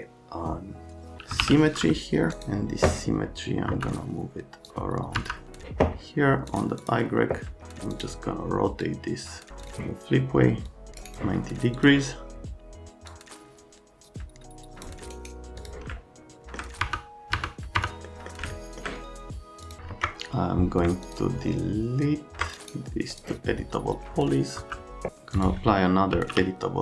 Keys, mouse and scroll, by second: 1.0-1.9 typing, 3.7 F3, 4.7 click, 5.1 F3, 15.9 alt+middle click, 16.3 alt+middle click, 16.8 F3, 17.3 F3, 17.8 F3, 18.1 right click, 18.5 alt+right click, 19.7 middle click, 19.9 Escape, 19.9 `, 21.0 ctrl+click, 22.6 right click, 23.1 click, 24.6 F3, 25.4 middle click, 25.8-26.7 typing.